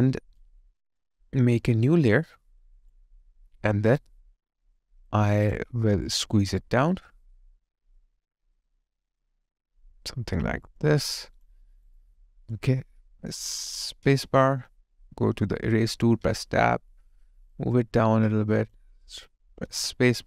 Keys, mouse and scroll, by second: 5.1 alt+click, 11.1 alt+click, 11.7 alt+right click, 12.0 alt+click, 14.1 space.